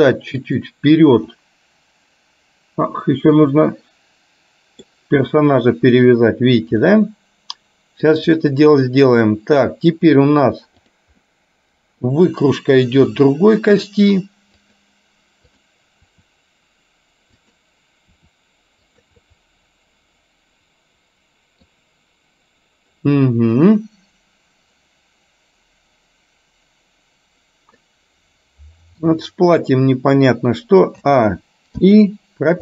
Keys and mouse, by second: 1.5-5.0 middle drag, 6.8-8.2 middle drag, 8.5 middle click, 11.0 click, 11.3 middle click, 13.2 r, 15.6 click, 18.3 r, 19.2-21.7 middle drag, 28.0-29.2 middle drag, 31.1 a, 32.0 i.